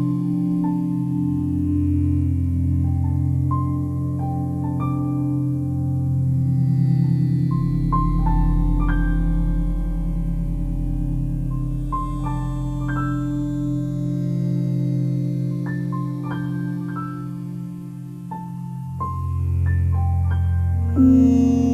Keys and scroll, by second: 3.0 ctrl+alt+shift+e, 18.9 ctrl+alt+shift+e, 21.6 ctrl+u.